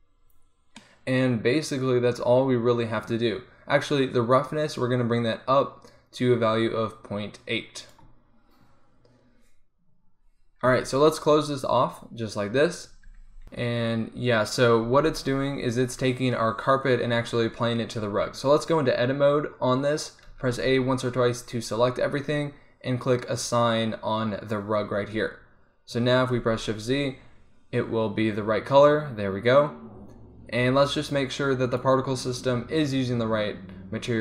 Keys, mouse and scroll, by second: 0.4-6.9 middle drag, 11.7 click, 13.3 z, 15.4 z, 15.7 z, 18.1 Tab, 20.4 a, 20.7 a, 23.4-25.8 drag, 25.8 Tab, 26.7 shift+z, 31.9-34.0 drag, 34.0-34.2 middle drag.